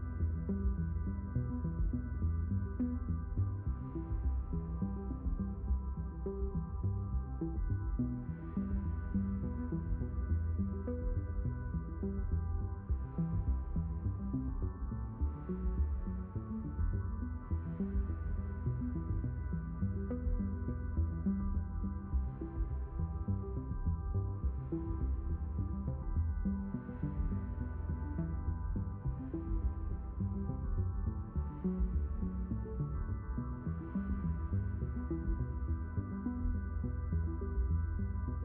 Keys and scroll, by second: 0.7 ctrl+z, 4.6 q, 15.3 shift+n, 17.0 s, 22.3 q, 24.3 shift+n, 26.0 q, 32.6 q, 33.1 w, 36.2 shift+n, 38.0 s.